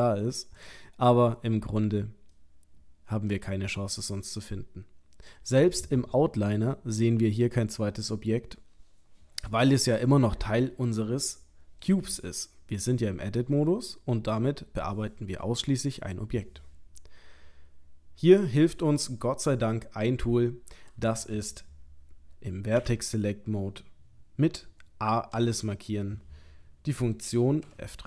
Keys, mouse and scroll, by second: 0.5 click, 0.9-1.4 scroll down 7, 1.8-2.3 scroll up 4, 2.3 middle click, 5.3-8.3 scroll up 1, 25.3 a, 27.6 F3.